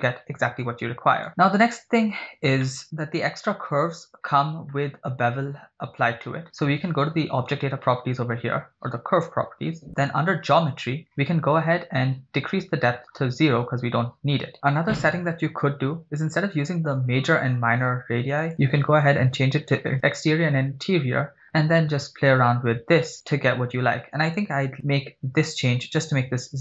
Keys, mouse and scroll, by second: 0.4 click, 1.3 click, 2.6 middle click, 2.9 scroll up 2, 3.8 scroll up 2, 6.5 click, 9.2 scroll down 3, 10.1 click, 11.0 scroll down 1, 12.7 click, 14.5 right click, 18.6 click, 21.7-23.4 drag.